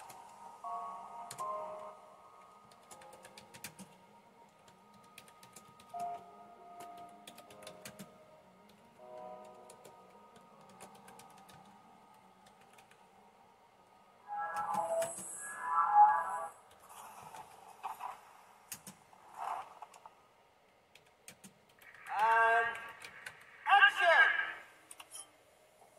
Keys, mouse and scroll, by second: 0.0-1.3 typing, 2.5-13.3 typing, 14.6-18.7 typing, 21.0-23.8 typing.